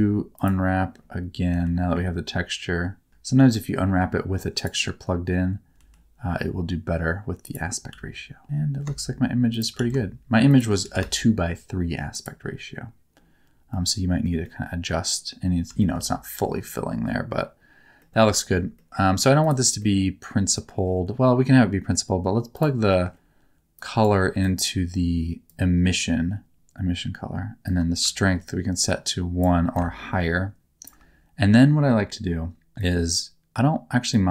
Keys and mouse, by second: 1.4 r, 3.3 g, 4.5 click, 5.7 r, 7.4 ctrl+click, 7.9 s, 8.4 g, 9.5 shift+click, 9.7 s, 10.4 shift+click, 10.8 g, 12.1 shift+click, 13.7 middle click, 14.4 middle click, 15.7 shift+middle click, 18.0 middle click, 18.8 middle click, 19.4 click, 19.7 middle click, 22.5 click, 22.9 middle click, 23.7 click, 23.9 click, 24.4 click, 25.4-26.5 drag, 27.7-29.4 drag, 29.8-30.8 ctrl+shift+drag, 32.8 click, 34.1-34.3 drag.